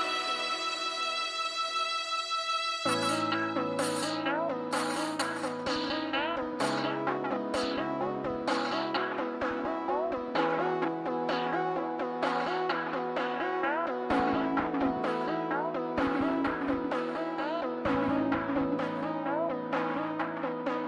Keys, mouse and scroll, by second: 2.6 right click, 2.8 middle click, 9.0 middle click, 13.0 middle click, 13.2 scroll up 1, 15.9-16.4 scroll down 1, 17.5 scroll up 1, 18.5 middle click, 18.7 scroll up 1, 19.0 middle click, 19.7 scroll down 1, 19.8 middle click.